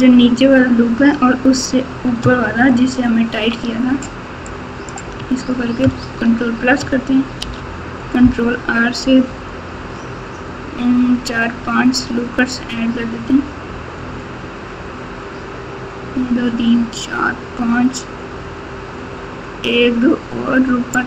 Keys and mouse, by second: 2.5 ctrl+KP_2, 3.0-3.4 ctrl+KP_2, 3.6 ctrl+KP_2, 4.4 click, 5.8 ctrl+KP_Add, 7.4 ctrl+r.